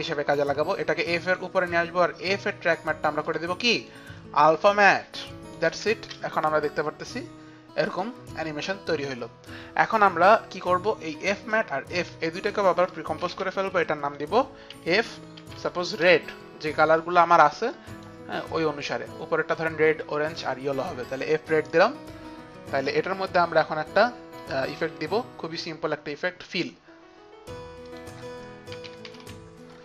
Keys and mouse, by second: 0.0-0.3 typing, 2.4 click, 3.3 click, 3.9 click, 4.6 click, 5.3 click, 5.7 space, 8.0 click, 11.4 click, 12.0 shift+click, 13.3 c, 14.5-18.2 typing, 14.7 shift+click, 14.9 shift+click, 15.4 shift+click, 15.7 shift+click, 17.7 click, 19.5-20.3 typing, 19.8 click, 21.8 click, 22.6 click, 24.4 click, 27.9 click, 28.6-29.7 typing.